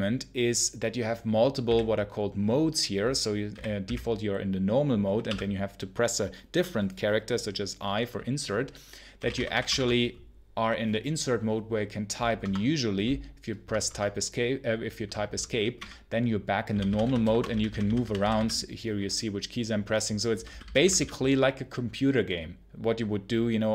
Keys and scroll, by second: 1.5 b, 3.4 w, 3.7 b, 5.1 i, 8.8-10.0 typing, 12.3 Escape, 13.5 Escape, 13.7 Escape, 15.6-18.4 typing, 20.0-21.0 typing.